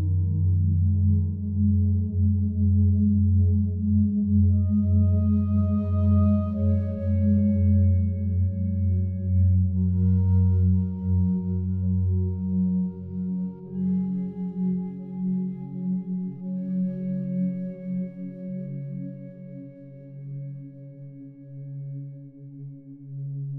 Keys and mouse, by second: 2.3 click, 2.7 click, 3.7 click, 4.8 shift+click, 7.5 ctrl+p, 8.7 Down, 8.8 Down, 9.0 Down, 9.2 Down, 10.4 Return, 12.4 click, 13.0-13.8 drag, 14.1 click, 15.0 g, 19.4 Escape, 20.1 shift+click, 21.0 g.